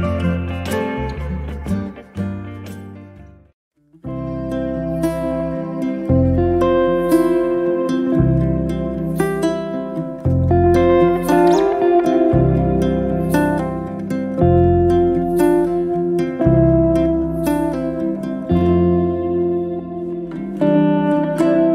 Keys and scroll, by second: 6.3 space.